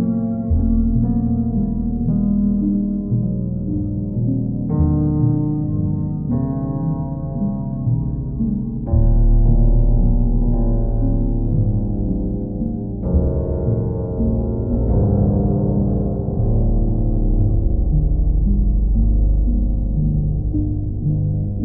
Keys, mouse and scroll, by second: 1.0 click, 1.8 alt+click, 2.7 click, 3.4 alt+click, 4.2 alt+click, 4.4 shift+click, 6.6 click, 8.2 click, 9.7 alt+click, 10.4 click, 11.0 click, 11.4 alt+click, 12.1 click, 12.5 click, 13.4 click, 13.8 alt+click, 14.4 click, 15.4 right click, 18.7 click, 20.4 right click.